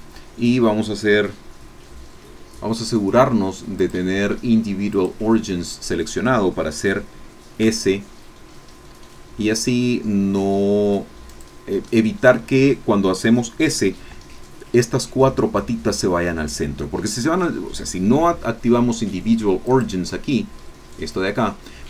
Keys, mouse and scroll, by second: 3.7 click, 4.9 click, 6.7 click, 7.6 s, 11.3 click, 11.8-13.3 middle drag, 19.7 click.